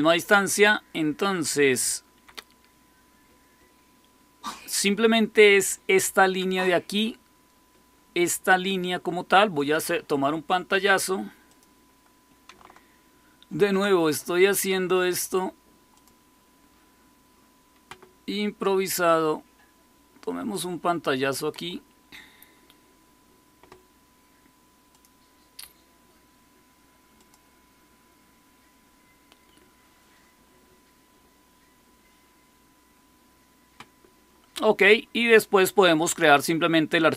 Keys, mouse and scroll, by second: 1.7 Down, 9.5 click, 11.4 click, 13.4 super+Print, 15.9 click, 18.6-20.5 drag, 24.8 click, 27.1 click.